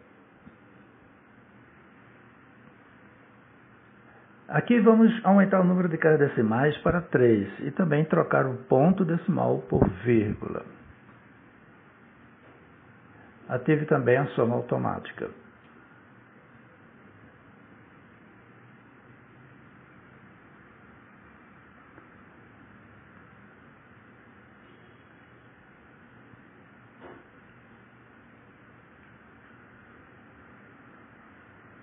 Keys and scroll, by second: 1.7 shift+a, 2.2 r, 2.7 a, 4.0 Return.